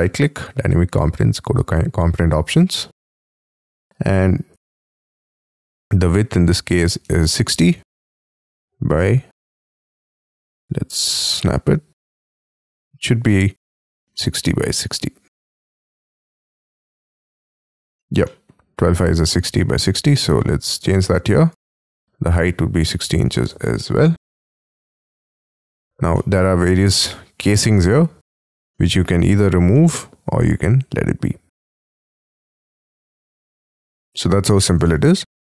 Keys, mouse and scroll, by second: 3.9 t, 4.5 t, 7.0 space, 7.3 t, 9.8 middle click, 11.2 Up, 13.2 middle click, 14.2 shift+scroll down 2, 15.8 y, 16.4 middle click, 16.8-17.9 typing, 16.9 scroll up 4, 18.2 middle click, 22.3 6, 22.8 0, 23.6 shift+', 24.2 Tab, 26.1 middle click, 26.7 scroll up 6, 27.0 middle click, 27.7 scroll down 3, 28.2-28.7 scroll up 10, 28.7 middle click, 29.2 scroll down 7, 29.7 middle click, 32.2 scroll down 6, 32.4 space, 32.6 double click, 32.8 scroll down 4, 33.2 y, 33.3 middle click, 34.0-34.7 scroll up 15, 34.8 shift+middle click.